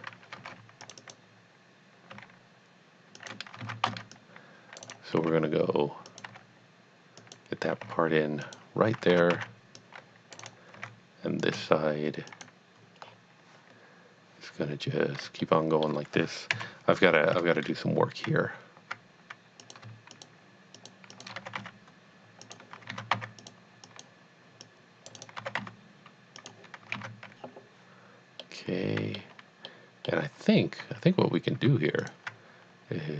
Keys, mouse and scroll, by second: 0.9 click, 1.0 double click, 2.1 g, 3.2 click, 3.6 alt+a, 4.1 c, 4.2 click, 4.6 click, 4.9 right click, 5.2 r, 6.4 g, 7.2 click, 7.8 r, 8.5 click, 9.4 alt+x, 9.9 click, 10.4 right click, 10.8 r, 11.4 click, 11.5 g, 12.3 click, 13.0 scroll up 1, 15.4 shift+middle click, 16.5 KP_7, 19.7 click, 20.2 shift+click, 20.9 shift+double click, 21.2 shift+click, 21.4 g, 21.8 y, 22.5 click, 22.9 alt+a, 23.2 c, 23.5 click, 23.9 click, 24.7 click, 25.2 right click, 25.4 g, 26.1 y, 26.5 click, 27.2 a, 28.4 middle click, 29.7 middle click, 32.0 alt+click.